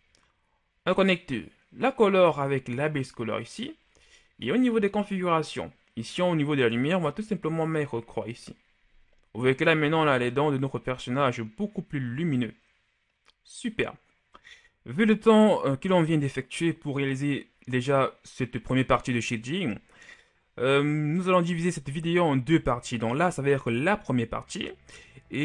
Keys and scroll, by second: 7.7 KP_3, 8.1 Return, 9.7 a.